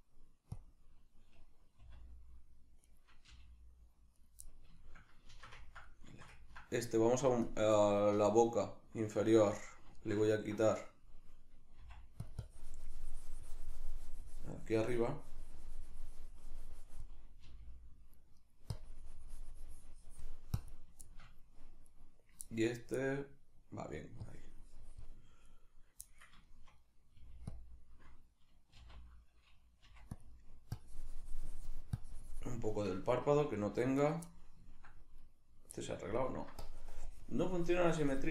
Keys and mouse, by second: 2.9 right click, 3.3 g, 4.2 right click, 4.4-7.5 middle drag, 7.5 click, 9.6-12.3 middle drag, 11.8 f, 12.3 click, 16.4-18.5 drag, 18.5 right click, 18.8-21.0 drag, 21.0 shift+middle click, 21.9 right click, 22.5-24.2 shift+middle drag, 24.2-25.5 drag, 25.5 right click, 26.0-27.6 middle drag, 27.2 g, 27.6 click, 28.8 alt+g, 30.2 click, 30.4 middle click, 30.8-34.1 drag, 33.3 g, 34.1 right click, 34.3 middle click, 35.2 right click, 35.7 middle click, 36.6-38.3 drag.